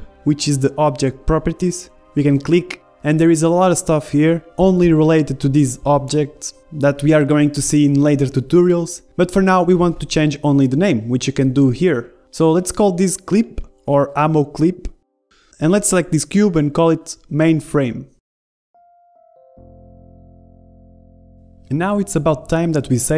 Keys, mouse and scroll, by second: 1.1-3.0 drag, 5.4-12.3 middle drag, 12.3-13.6 drag, 14.3 Left, 14.4 Left, 14.8 m, 16.9 right click, 17.7 click, 21.0-22.0 right drag, 22.0 click, 22.2 middle click.